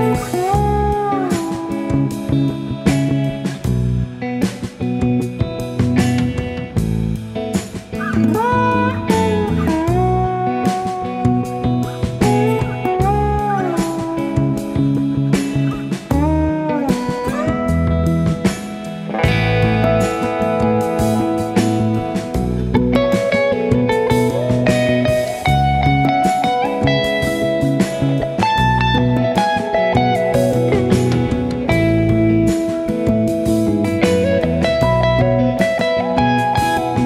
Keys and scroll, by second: 0.0-0.3 typing, 0.6 ctrl+d, 3.8 space, 4.3 ctrl+s, 5.5 space, 8.4 shift+F6, 14.6 F1, 15.0 Page_Down, 15.2 Page_Up, 16.2 Page_Down, 17.3 F7, 18.1 F1, 19.3-20.3 typing, 22.3 F1, 26.0 F1, 26.4-26.9 typing, 28.6 shift+F6, 32.1 F7, 32.8 F1, 33.3 ctrl+d, 34.0 ctrl+*, 34.4-35.2 typing.